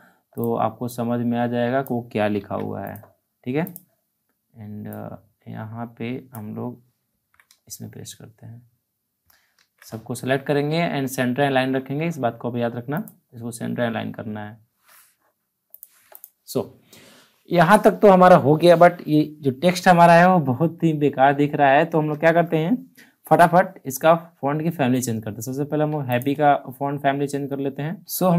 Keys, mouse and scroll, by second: 2.3 ctrl+c, 2.8-7.0 drag, 7.0 ctrl+v, 9.5 ctrl+a, 12.9 click, 13.3-15.2 scroll up 1, 15.7 click, 25.8 ctrl+Num_Lock, 25.8 click.